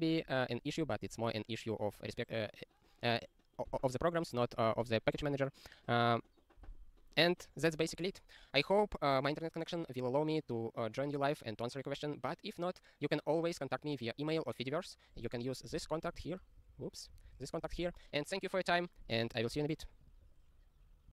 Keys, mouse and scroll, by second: 5.2 super+o, 6.6 click, 15.7 click, 15.8 middle click, 16.1 click, 16.7 ctrl+/, 17.2 ctrl+a, 17.2 ctrl+space, 17.4 ctrl+e, 17.7 ctrl+g.